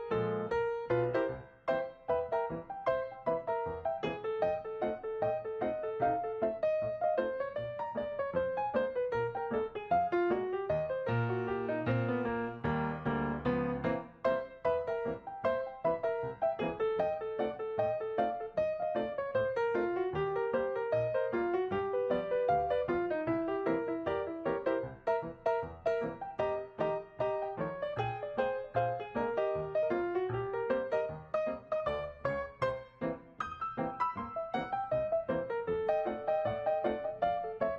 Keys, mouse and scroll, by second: 0.2 right click.